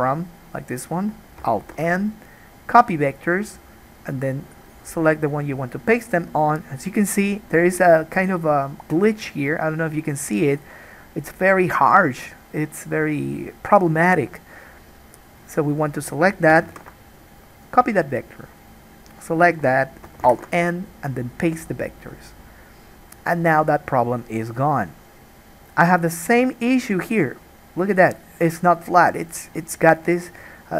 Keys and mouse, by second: 1.8 alt+n, 4.2 click, 4.9-15.5 middle drag, 15.5-16.7 drag, 16.7-18.7 alt+middle drag, 16.9 alt+n, 18.7 click, 18.8-30.7 middle drag, 20.4 alt+n.